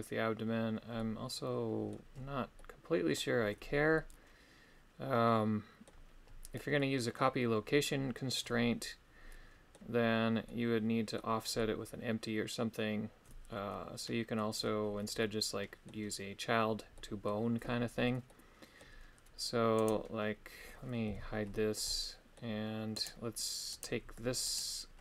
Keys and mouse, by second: 0.9 middle click, 2.6 middle click, 3.9-5.9 middle drag, 6.8 middle click, 8.1-9.8 middle drag, 10.4 middle click, 11.5-14.3 middle drag, 15.2 middle click, 16.9 middle click, 18.2 middle click, 19.9 right click, 21.0 h, 21.8 middle click, 22.9 right click, 23.8 right click, 24.5 right click.